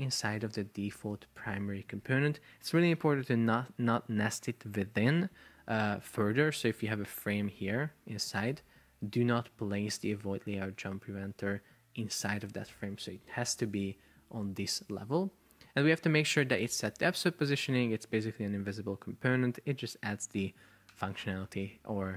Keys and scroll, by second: 7.7 super+x, 8.7 super+v, 13.0 super+BackSpace.